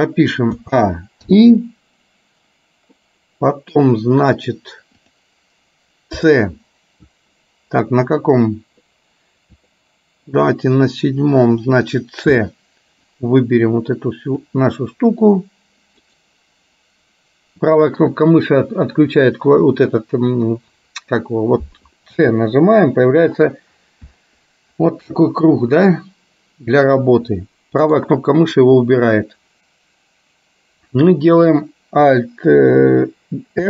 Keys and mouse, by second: 1.5 i, 3.1 middle click, 5.1 click, 9.8 click, 12.6 c.